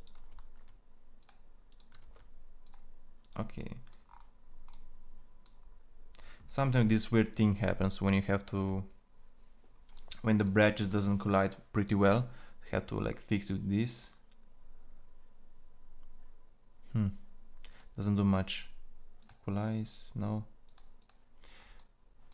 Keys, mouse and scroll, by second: 0.0 ctrl+a, 1.7 ctrl+a, 21.3-22.3 drag.